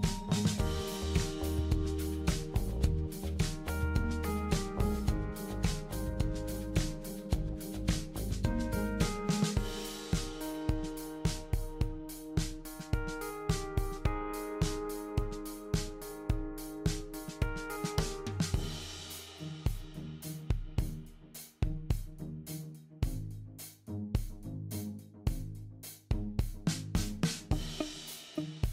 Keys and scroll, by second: 0.0-2.0 typing, 7.9-9.4 typing, 10.6 typing.